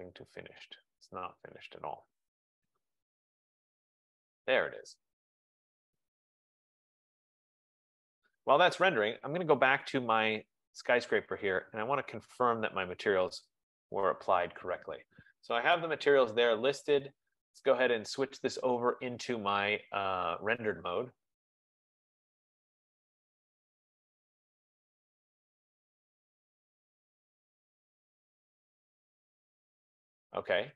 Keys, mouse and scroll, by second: 2.3 click, 10.7 click, 11.2 F15, 11.8 click, 12.7 click, 13.8 click, 17.6 click, 19.1 click, 21.0 click.